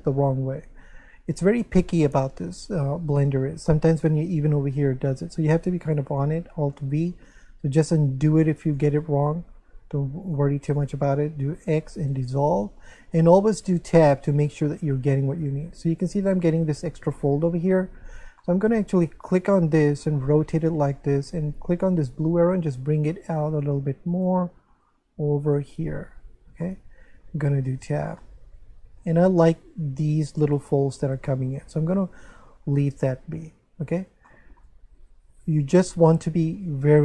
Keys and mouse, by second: 2.7 ctrl+z, 6.7 alt+v, 8.6 click, 10.2 right click, 10.7 shift+right click, 11.8 x, 12.1 click, 13.5 Tab, 14.1 middle click, 18.0 Tab, 18.4 middle click, 19.3 right click, 19.8 middle click, 21.9 click, 24.1 right click, 24.8 click, 26.6 middle click, 27.3 Tab, 28.2 middle click, 31.3 shift+middle click, 33.8 Tab, 34.3 shift+middle click, 35.5 right click.